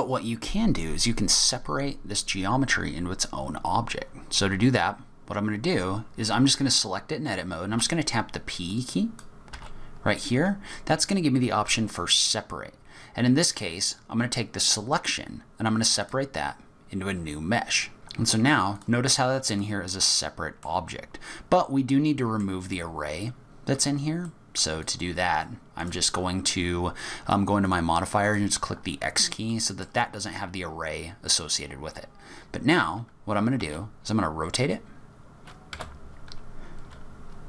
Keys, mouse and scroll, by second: 8.7 click, 9.5 p, 17.9 ctrl+z, 17.9 middle click, 17.9 click, 17.9 scroll down 4, 18.7 click, 19.5 click, 20.1 middle click, 21.3-22.2 scroll down 8, 22.2 middle click, 23.4-24.0 scroll up 1, 24.0 scroll up 2, 24.2 middle click, 24.8 click, 25.1 scroll up 2, 25.8 click, 27.6 click, 28.2 click, 28.9-29.5 scroll down 8, 29.5 middle click, 30.1-30.7 scroll up 3, 32.4-33.4 scroll up 4, 33.4-34.0 scroll up 1, 34.0 r, 36.9-37.2 scroll up 1, 37.2-37.4 scroll down 9.